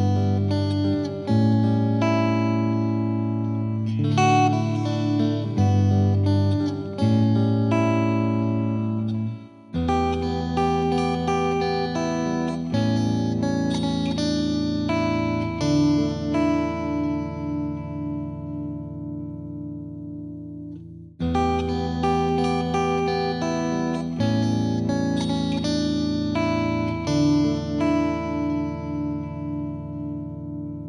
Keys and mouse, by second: 0.6 right click, 0.6 click, 6.3 right click, 6.5 click, 10.7 click, 12.0 click, 13.6 click, 15.6 shift+click, 18.3 shift+click, 22.5 shift+click, 24.8 click, 24.9 click, 25.8 click, 27.5 click, 29.6 click, 29.8 shift+click.